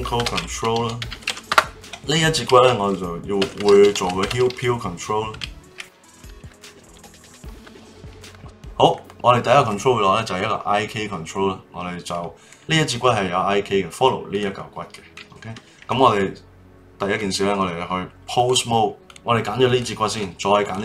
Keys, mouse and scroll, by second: 1.8-3.8 drag, 3.8 e, 5.8 BackSpace, 6.0 e, 6.1 e, 6.7 click, 7.7 click, 8.4 middle click, 9.0 click, 12.5 click, 14.3 click, 17.2-19.0 drag, 19.6 click, 20.6 shift+click.